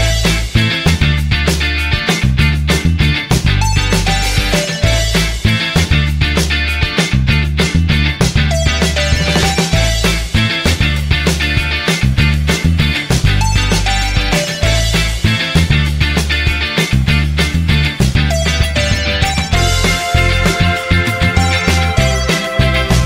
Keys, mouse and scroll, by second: 8.0 typing, 21.9 typing.